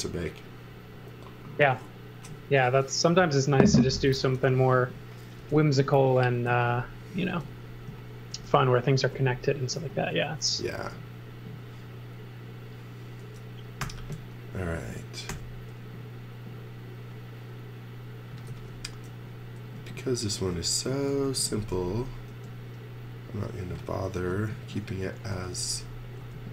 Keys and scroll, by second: 5.4 space, 6.5 z, 7.1 x, 7.3 space, 13.8 u, 15.3 g, 18.1-19.1 typing, 20.7-22.3 typing, 24.2 super+z, 25.1-26.2 typing.